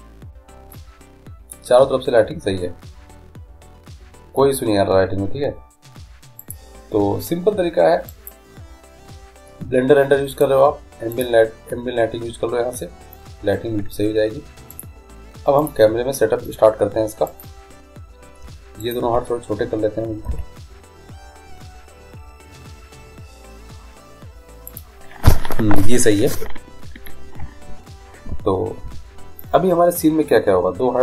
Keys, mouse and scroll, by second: 1.0-3.0 middle drag, 6.7-8.5 drag, 10.5-12.3 drag, 15.8 click, 17.5-20.8 right drag, 20.5 s.